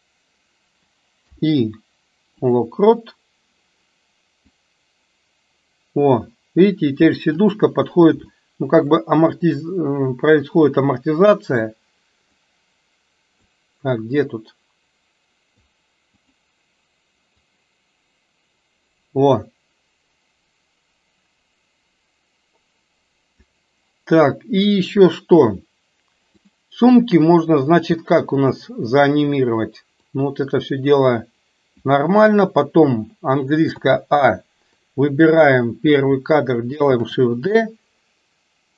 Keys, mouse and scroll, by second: 1.2 i, 4.7-7.5 drag, 8.5-9.1 shift+middle drag, 14.2-15.9 drag, 16.4 click, 17.5-23.6 drag, 30.1-32.0 drag, 33.8 a, 34.8-35.2 drag, 37.0 shift+d.